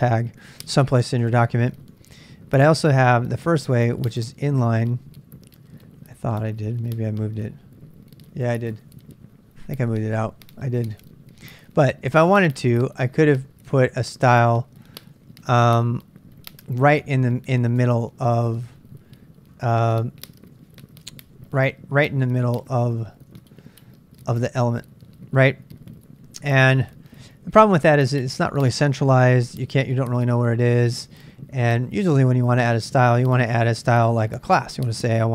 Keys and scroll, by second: 0.0-4.0 typing, 5.1-15.5 typing, 17.9 ctrl+[, 18.0 k, 19.6 ctrl+a, 19.8 ctrl+a, 20.7 k, 21.3 ctrl+[, 21.4 k, 22.1 Return, 22.8-26.2 typing.